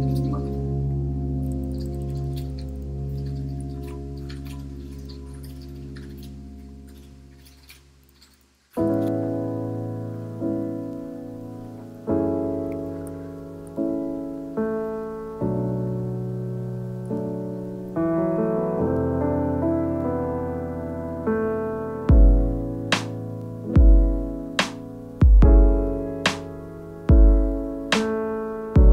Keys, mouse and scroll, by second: 3.0 z, 3.9-5.9 shift+drag, 9.1-11.1 right drag, 11.7-12.8 right drag, 12.8 ctrl+2, 18.2 ctrl+r, 19.4 click, 21.6 click, 22.4 x, 23.2 x, 24.5 click, 25.1-27.1 drag, 27.8 click, 28.5 Tab, 28.8 alt+z.